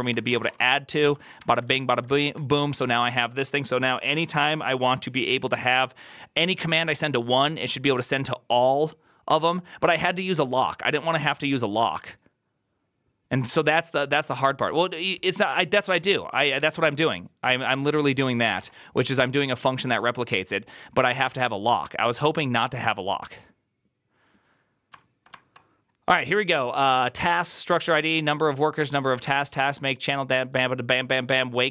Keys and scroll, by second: 0.0-2.6 typing, 0.9 ctrl+c, 18.5 alt+f.